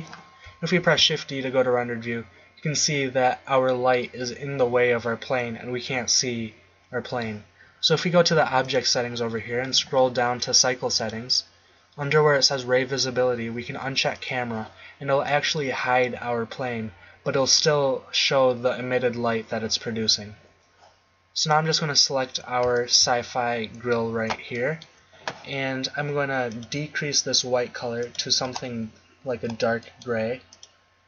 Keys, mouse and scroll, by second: 0.9 shift+z, 8.6-9.8 drag, 13.3 middle click, 14.6-20.1 drag, 21.4-23.7 drag, 23.7-25.8 middle drag, 26.7-28.5 drag, 30.6-31.0 drag.